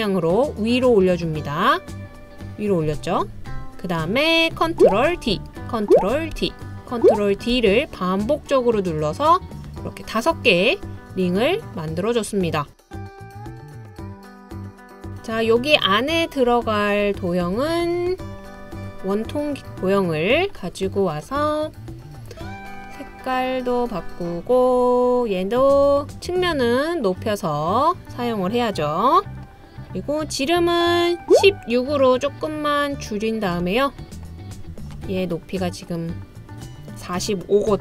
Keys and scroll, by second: 5.2 super+d, 6.4 super+d, 7.5 super+d.